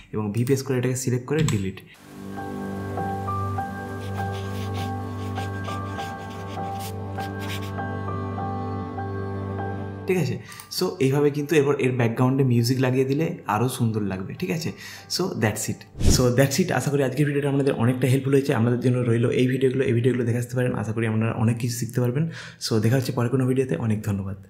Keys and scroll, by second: 1.4 Delete.